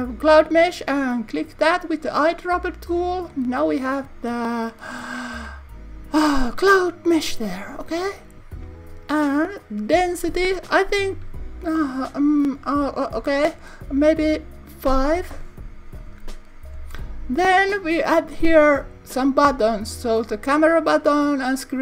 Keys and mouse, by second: 9.6 click, 18.3-21.8 drag.